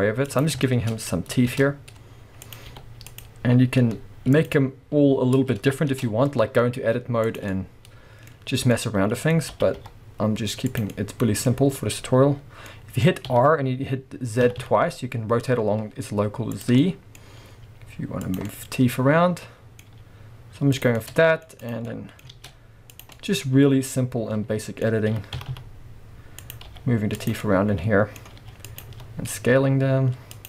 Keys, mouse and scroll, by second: 0.4 click, 0.7 shift+middle click, 1.0-1.5 scroll up 2, 1.5 shift+d, 2.6 click, 2.7 r, 3.2 click, 3.8 s, 4.4 click, 5.3-5.9 scroll down 2, 5.9 shift+d, 7.4 click, 7.5-10.8 middle drag, 8.3-8.7 scroll up 2, 9.5 g, 10.8 click, 10.9-16.6 middle drag, 11.5-12.7 scroll up 2, 13.2 r, 16.6 click, 16.8-18.4 middle drag, 17.1-17.5 scroll up 2, 17.5 g, 18.4 click, 18.5-20.8 middle drag, 19.9 g, 20.8 click, 21.0 middle click, 21.6 click, 21.8 scroll up 1, 22.0 middle click, 22.3 shift+d, 23.0 click, 23.1-24.2 middle drag, 25.1 r, 26.5 click, 26.7 g, 27.3 click, 27.4 middle click, 28.4 g, 28.8 click, 28.8 s, 30.4 click.